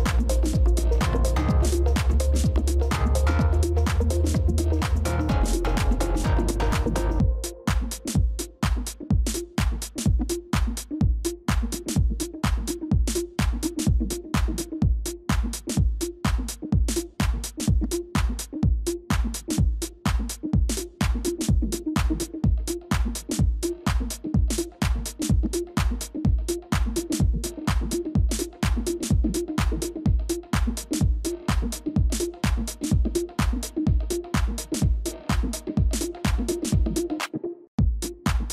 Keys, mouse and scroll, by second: 12.1 shift+click, 16.8 ctrl+c, 21.1 shift+click, 26.2 ctrl+z.